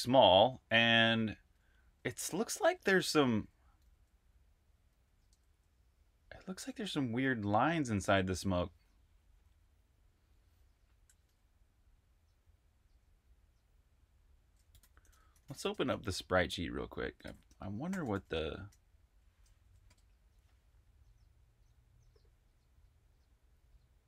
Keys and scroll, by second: 0.0-7.0 typing, 7.9 super+q, 14.3-18.5 typing, 19.4 Tab, 19.7 Return.